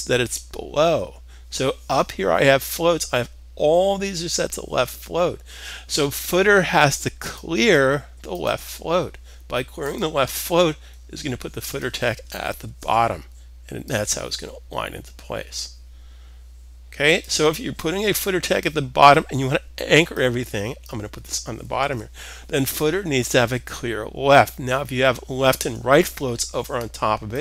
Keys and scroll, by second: 12.2 super+s, 21.3 super+s.